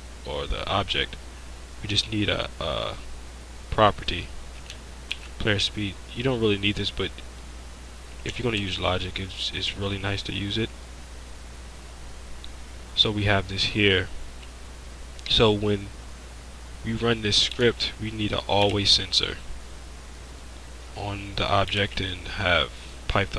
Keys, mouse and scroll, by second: 0.2 middle click, 5.1 ctrl+c, 14.8 click, 17.6 shift+a, 18.7 shift+a, 21.8 shift+a.